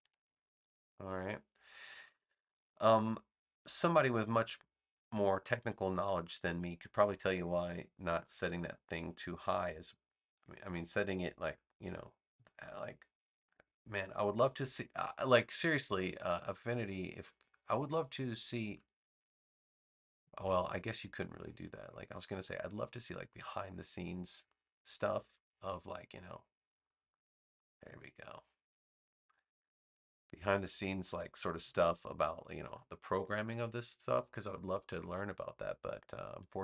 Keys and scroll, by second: 0.0 6, 0.2 Return, 31.3 v.